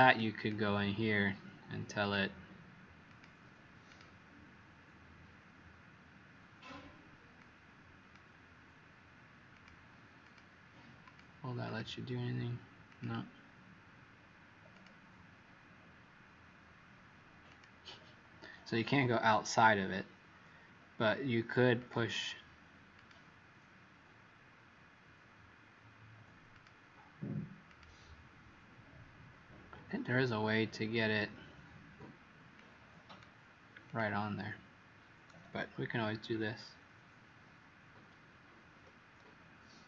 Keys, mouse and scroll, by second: 0.3 click, 1.9 click, 11.6 click, 12.8 click, 36.2 Right, 36.9 Right, 37.4 Right, 37.9 Right, 38.7 Right.